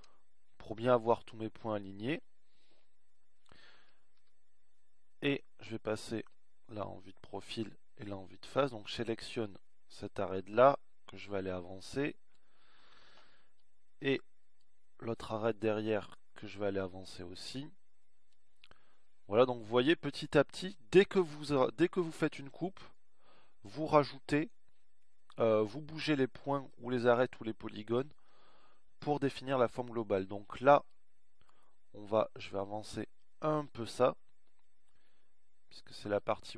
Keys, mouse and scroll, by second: 3.2-5.3 middle drag, 5.3 KP_1, 7.0 KP_3, 8.2 KP_1.